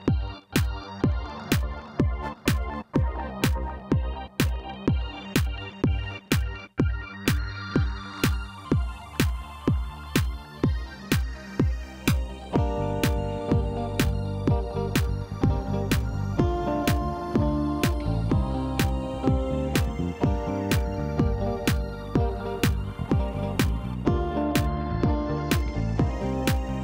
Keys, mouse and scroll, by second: 0.4 scroll, 0.8 scroll up 5, 0.9 middle click, 1.6 scroll down 2, 1.8 middle click, 2.9-3.2 scroll down 7, 3.2 scroll up 1, 3.3 Tab, 3.5 click, 4.3 Delete, 4.6 click, 5.8 click, 6.5-7.0 scroll up 4, 7.0-8.0 drag, 8.0 Tab, 8.4-9.9 middle drag, 10.3 KP_3, 10.7 click, 11.8 click, 13.1 r, 17.4 middle click, 18.1-18.4 scroll up 1, 18.4-19.4 middle drag, 19.4 click, 19.7 scroll up 1, 20.0 middle click, 20.7 click, 20.9 click, 21.2 Delete, 22.4 click, 23.1-23.5 scroll up 2, 24.0 click, 24.6 shift+click, 24.9 shift+click, 25.6 f, 26.0 click, 26.3 shift+click, 26.7 shift+click.